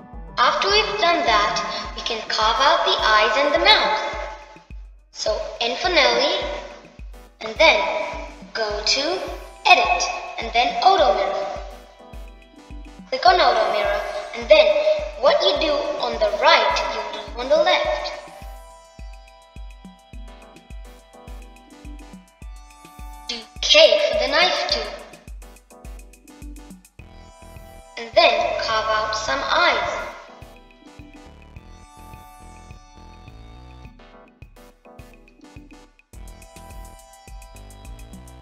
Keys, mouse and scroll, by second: 0.0-1.9 middle drag, 2.1 middle click, 11.5 t, 12.7 t, 15.3 t, 16.0-19.1 middle drag, 20.3-21.7 middle drag, 23.5-25.6 middle drag.